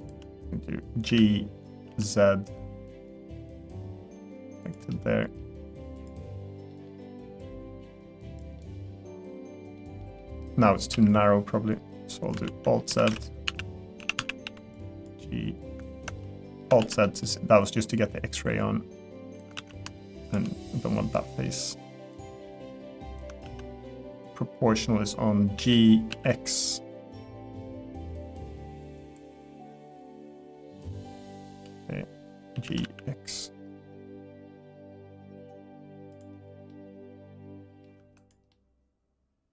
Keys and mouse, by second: 0.0 shift+click, 1.1 g, 4.9 middle click, 6.7 middle click, 7.4-8.4 drag, 8.6-9.7 middle drag, 10.0 middle click, 10.9 KP_1, 12.4 alt+z, 12.9 1, 13.4 a, 14.4 b, 16.2 middle click, 16.8 alt+z, 17.0 middle click, 18.0-19.4 drag, 19.6 ctrl+z, 21.1 middle click, 22.2 click, 23.4 ctrl+z, 25.5 g, 32.5 g, 36.7-37.8 middle drag, 38.0 Tab, 38.5-39.5 middle drag.